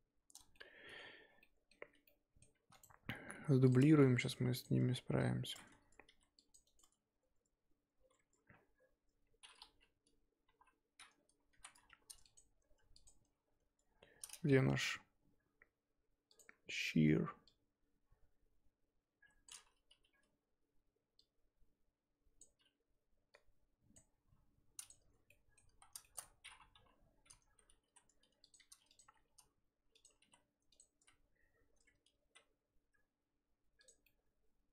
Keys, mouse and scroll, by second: 1.2 scroll down 3, 1.4-2.6 middle drag, 2.6 shift+d, 3.7 p, 3.9 Tab, 4.3 click, 4.6 click, 4.8 Tab, 5.1-6.0 scroll up 1, 6.0 ctrl+r, 8.7-10.5 scroll down 3, 10.5 KP_3, 11.6 z, 12.3 alt+click, 13.0 alt+click, 14.8 t, 16.4-17.5 drag, 19.9 KP_1, 21.2 click, 23.6 click, 24.9 click, 25.3 middle click, 25.6 z, 26.0 shift+middle click, 26.3-26.7 scroll up 2, 26.7-29.0 typing, 31.0 z, 34.0 middle click.